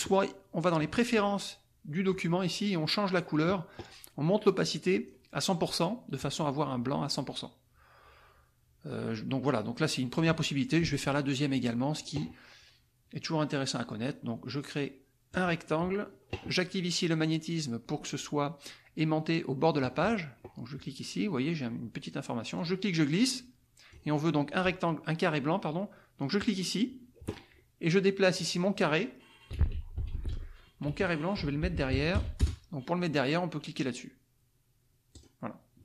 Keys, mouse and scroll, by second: 0.6 click, 2.6 click, 4.4 click, 9.8 click, 10.7 click, 11.5 click, 15.3 click, 19.6 click, 22.6-24.0 drag, 26.3 click, 28.3 click, 29.2-32.4 typing, 35.1 click.